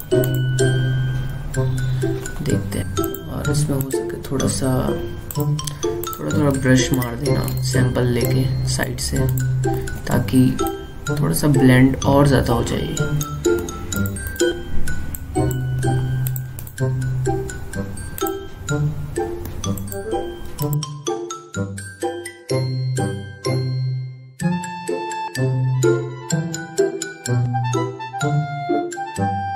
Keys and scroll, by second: 11.0 ctrl+z, 22.9 ctrl+z, 23.9 ctrl+z, 26.3 ctrl+z.